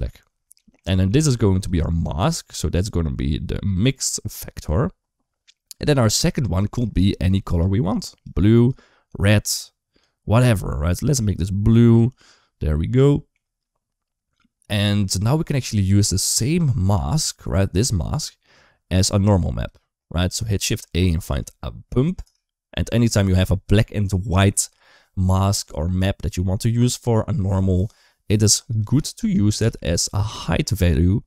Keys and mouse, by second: 1.4-4.2 drag, 5.4 middle click, 6.2 middle click, 7.3 click, 12.9 shift+middle click, 14.9 shift+middle click, 17.1-19.5 drag, 20.4 shift+a, 29.4 g, 30.9 click.